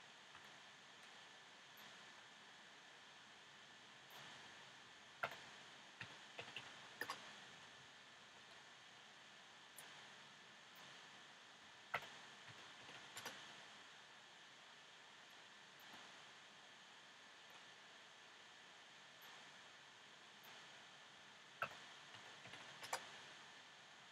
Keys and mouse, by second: 0.3 a, 1.0 b, 4.4 s, 8.3 a, 8.8 b, 11.6 s, 13.9 middle click, 17.4 a, 17.9 b, 21.2 s.